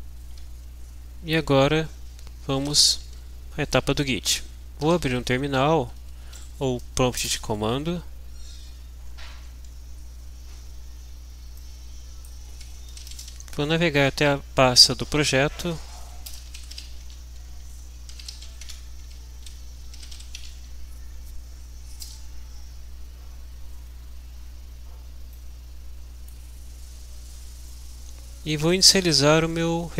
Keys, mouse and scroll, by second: 4.6-5.6 typing, 5.9 Down, 7.5 Return, 11.6 middle click, 11.8 click, 12.7-13.6 typing, 15.3-20.7 typing, 22.1 Return, 25.4-26.9 drag.